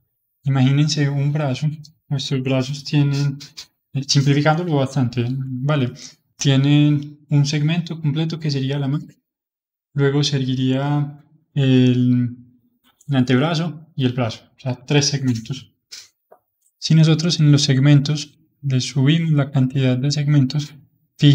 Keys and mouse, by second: 18.2-21.3 drag.